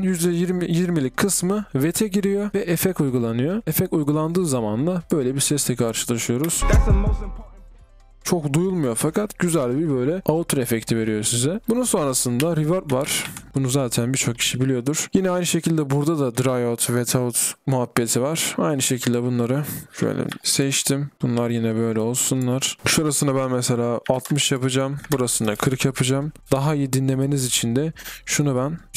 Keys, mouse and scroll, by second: 13.5-14.5 typing, 20.4-21.2 typing, 22.7-23.2 scroll up 1.